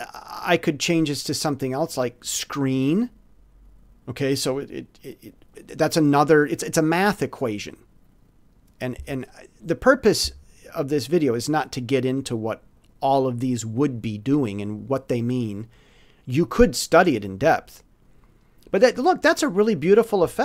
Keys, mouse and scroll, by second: 0.4 middle click, 2.2 click, 9.1 click, 12.5 click.